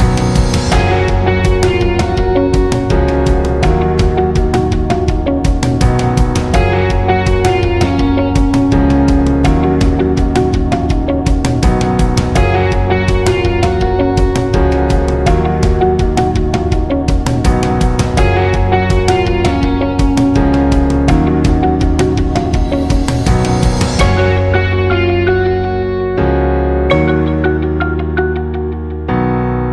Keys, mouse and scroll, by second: 0.7 alt+shift+click, 2.2 click, 4.3 shift+a, 5.8 click, 13.7-19.1 drag, 19.1-22.8 shift+drag, 23.2 alt+scroll up 1, 23.7 space, 23.9 click, 24.1 space, 24.6 click, 27.4 1, 28.7 Return.